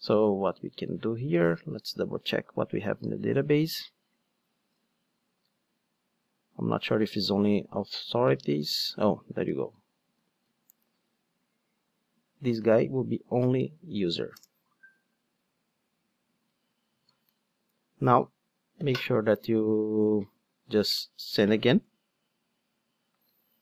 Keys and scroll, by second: 2.7 alt+super+r, 6.2 alt+super+r, 10.2 super+a, 10.4 super+c, 12.6 super+v, 16.3 super+Return.